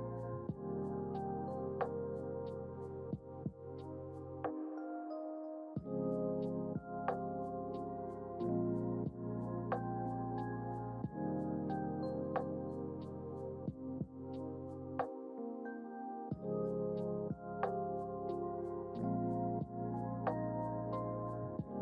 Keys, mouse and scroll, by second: 7.2 ctrl+z, 7.5 ctrl+z, 9.4 ctrl+shift+z, 10.9 click, 11.7 click, 13.5-19.6 drag, 20.9 click.